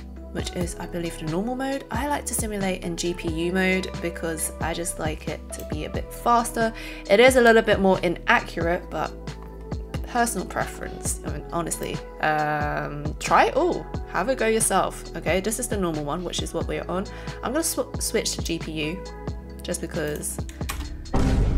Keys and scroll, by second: 20.7 space.